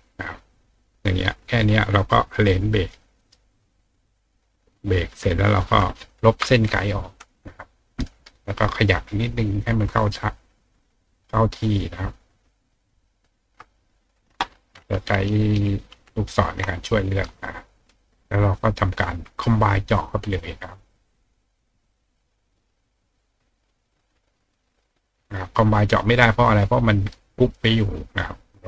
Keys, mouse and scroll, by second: 0.7 click, 2.0 click, 2.9 click, 3.2 right click, 4.0 click, 4.3 click, 5.1 click, 8.0-9.2 drag, 10.1-13.2 ctrl+drag, 18.0 click, 18.4 click, 25.0 click, 25.9 click, 27.4 click, 27.8 click, 28.2-28.6 drag.